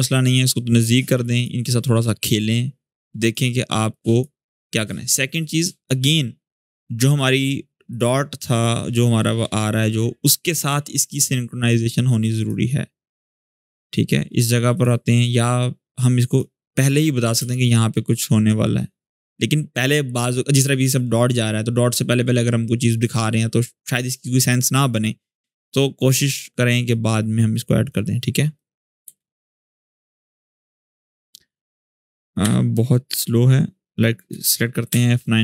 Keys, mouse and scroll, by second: 3.6-5.9 drag, 12.8-14.1 drag, 17.1 space, 19.1-20.6 drag, 25.4-26.4 click, 26.6-27.9 drag, 28.3-28.9 click, 28.8 space, 31.0-31.9 click, 32.2 u, 33.0-34.2 drag, 34.6 F9.